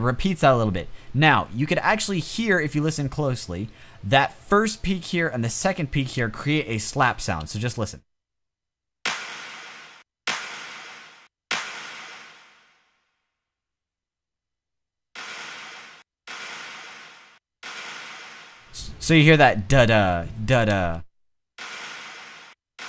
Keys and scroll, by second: 8.3-9.5 typing, 15.0 space, 15.1 space, 17.7 space, 20.8 space, 21.7 space.